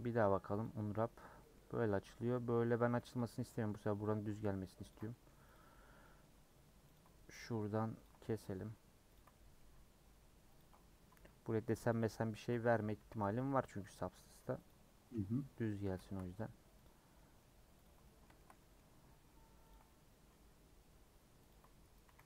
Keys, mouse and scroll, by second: 0.6 u, 2.3 middle click, 2.5 scroll up 1, 3.1 click, 3.3 middle click, 4.1 ctrl+click, 4.9 ctrl+click, 5.1 middle click, 5.5 click, 6.0 middle click, 6.9 ctrl+click, 7.1 middle click, 8.0 ctrl+click, 8.2 middle click, 9.1 ctrl+click, 9.3-10.5 middle drag, 10.5 ctrl+Left, 10.9-11.9 middle drag, 11.9 ctrl+Left, 12.2 a, 13.1 ctrl+z, 13.7 a, 14.7 u, 15.6 middle click, 16.3-17.1 scroll down 2, 16.8 click, 17.1 middle click, 17.8 ctrl+click, 18.0 middle click, 18.7-19.7 scroll up 1, 19.7 ctrl+click, 19.8-21.5 middle drag, 21.5 ctrl+click, 22.0 a.